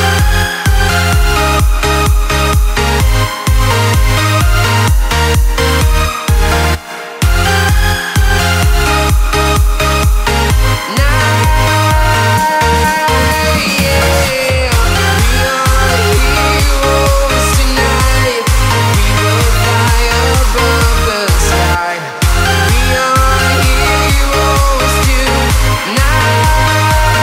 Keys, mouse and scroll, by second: 0.7-1.0 scroll down 1, 1.9 scroll up 1, 2.0 click, 2.2 scroll down 1, 2.4 right click, 3.2 scroll up 1, 4.7 right click, 5.4 click, 6.2 p, 7.2 e, 7.8 Return, 8.9 scroll up 1, 10.9 right click, 12.5-12.9 scroll down 1, 12.9 right click, 13.4 scroll up 1, 13.7 ctrl+z, 13.9 right click, 14.4 click, 15.9 click, 17.5 right click, 18.5-19.2 scroll down 1, 19.2 right click, 19.5 click, 19.8 right click, 20.6 scroll, 20.8 scroll up 1, 22.7 right click, 23.0 scroll down 1, 23.8 right click, 24.3 scroll, 24.7 right click, 25.4-25.7 scroll down 1, 25.8-27.2 right drag.